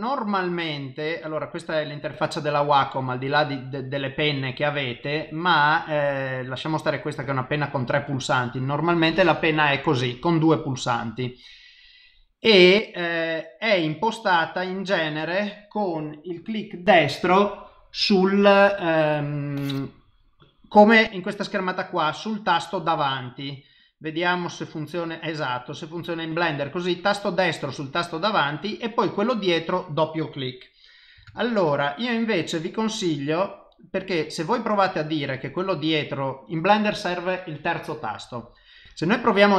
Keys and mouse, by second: 24.0 click, 24.3 right click, 28.9 click, 30.1 click.